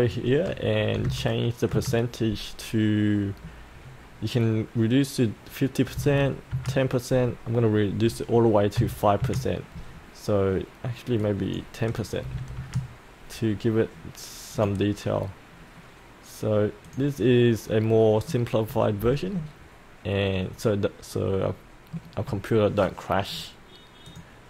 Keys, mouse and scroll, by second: 0.9 KP_5, 1.0 KP_0, 5.9 KP_1, 6.0 KP_0, 8.7 KP_5, 11.2 click, 12.2 KP_1, 12.3 KP_0, 14.6 click, 15.2 scroll up 1, 15.6-16.8 scroll down 1, 16.8 click, 17.7 middle click, 19.1-21.9 alt+middle drag, 24.0-24.4 drag.